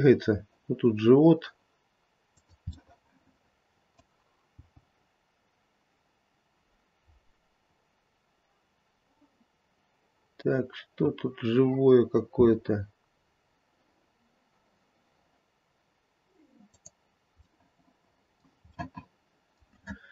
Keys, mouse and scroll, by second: 2.7 middle click, 3.8 middle click, 4.6 g, 17.4 middle click, 17.9 middle click, 18.7 middle click, 18.8-20.1 middle click.